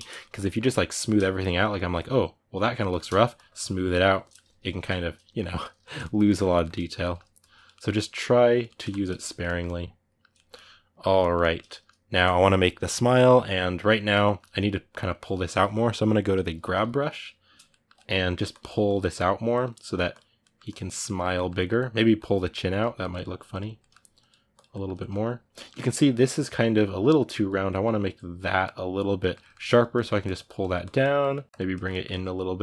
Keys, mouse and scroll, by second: 3.1 shift+click, 4.0 middle click, 4.6 ctrl+z, 5.0-7.1 middle drag, 7.1 ctrl+click, 7.5 ctrl+middle click, 7.7 ctrl+click, 8.4 ctrl+middle click, 8.6 shift+click, 9.0-16.3 ctrl+middle drag, 16.3 g, 17.4 ctrl+middle click, 18.1-20.2 drag, 20.2 middle click, 20.5 click, 20.8-21.9 middle drag, 21.9 click, 22.4 ctrl+middle click, 22.8 click, 23.5 ctrl+middle click, 24.0 click, 24.5-29.5 ctrl+middle drag, 29.5 click, 29.7 middle click, 30.0 click, 30.3 middle click, 30.6 click, 30.8 middle click, 31.5 click, 31.6 ctrl+middle click, 32.5 click.